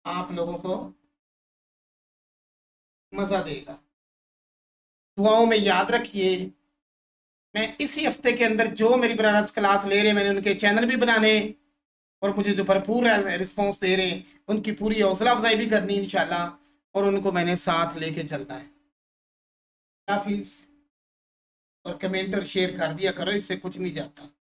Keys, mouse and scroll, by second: 0.6-2.1 alt+drag, 2.1 scroll up 1, 2.7-6.5 alt+shift+drag.